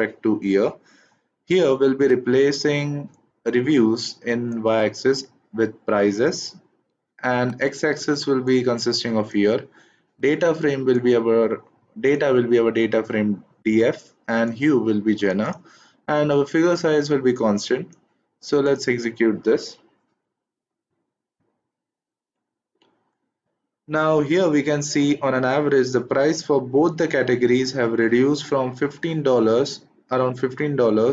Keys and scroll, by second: 19.5 shift+Return.